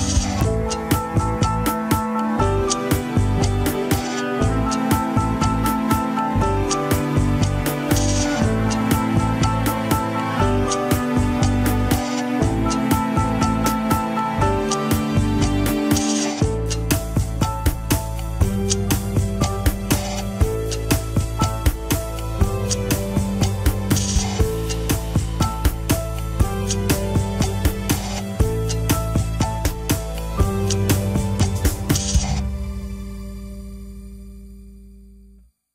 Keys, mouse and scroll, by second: 0.8 alt+z, 1.0 scroll down 3, 1.7 scroll up 2, 2.0-3.4 shift+middle drag, 3.4 scroll up 1, 3.7 alt+z, 3.9 shift+middle click, 4.2 alt+z, 4.7 shift+middle click, 5.4 click, 5.6 alt+z, 5.8 KP_1, 6.1 alt+z, 6.6 click, 6.8 alt+z, 7.1 click, 8.3 alt+z, 8.8 click, 9.0 alt+z, 9.3 click, 10.3 alt+z, 10.7 click, 11.1 KP_3, 11.4 scroll down 1, 11.8 click, 12.1 scroll up 2, 12.3 shift+middle click, 12.7 scroll up 1, 12.9 g, 13.9 click, 14.2 g, 15.5 click, 15.8 alt+z, 16.0 g, 17.0 KP_1, 17.5 g, 19.4 KP_3, 19.6 scroll up 1, 19.8 alt+z, 20.1 click, 20.3 g, 21.4 click, 21.6 g, 22.0 scroll down 2, 22.3 alt+z, 22.6 click, 23.5-25.4 typing, 24.4 scroll down 4, 25.6 alt+z, 26.0 click, 26.2 alt+z, 26.7 click, 27.5 scroll down 2, 27.6 KP_3, 27.8 scroll up 2, 27.9 ctrl+Tab, 28.4-29.1 scroll down 1, 29.1-29.6 scroll down 3, 29.2 ctrl+s, 30.1 click, 30.3-31.2 scroll down 1, 32.1-33.7 drag, 33.7 alt+z, 34.7 alt+z.